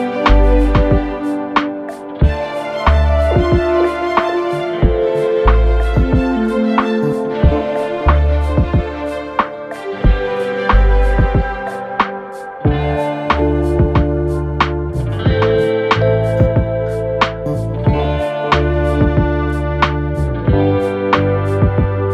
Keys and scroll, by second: 0.4 4, 8.6 ctrl+d, 8.7 Escape, 9.4 Escape, 11.9 3, 12.6 1, 13.8 ], 17.3 ].